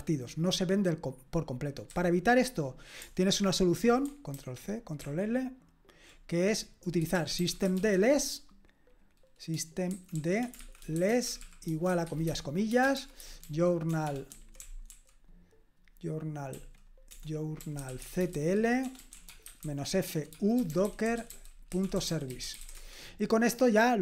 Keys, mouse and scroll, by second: 1.9 q, 3.4 ctrl+p, 4.3 ctrl+c, 5.1 ctrl+l, 6.9-8.3 typing, 9.7-15.4 typing, 17.5-23.1 typing.